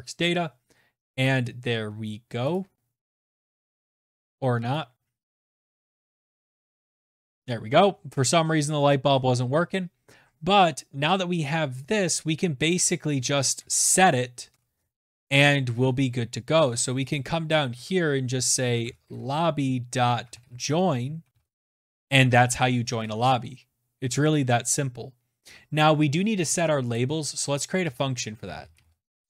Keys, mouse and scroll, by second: 1.0 click, 1.5 click, 2.0 click, 2.6 click, 3.2 click, 3.7 click, 4.4 click, 4.7-6.5 typing, 6.7 click, 10.2 click, 11.1 click, 12.0 Return, 12.2 Return, 12.9 Tab, 15.6 click, 16.2 Tab, 16.8-20.2 typing, 24.9 click, 25.3 click, 25.8 Tab, 26.3 Return, 26.5-29.2 typing.